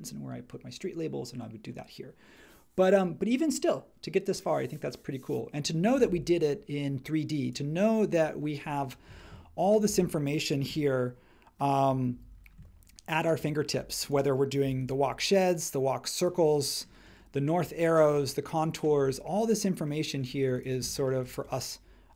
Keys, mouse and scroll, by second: 12.1 super+e, 14.6 m, 17.0 space, 20.4-22.1 drag.